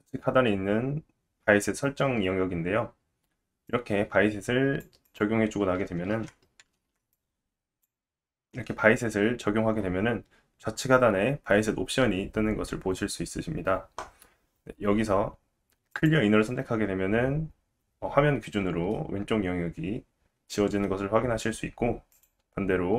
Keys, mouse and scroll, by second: 3.7-5.2 drag, 5.2-7.1 middle drag, 6.1 ctrl+z, 6.8 ctrl+z, 7.1-9.8 drag, 15.9 click, 18.9 middle click, 22.1 click.